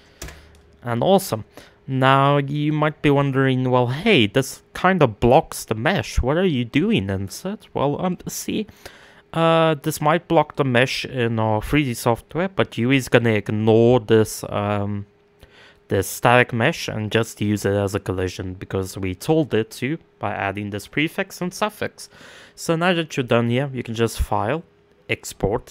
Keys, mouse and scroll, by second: 1.4-6.1 scroll down 1, 6.1-8.5 scroll down 1, 8.5-25.7 middle drag.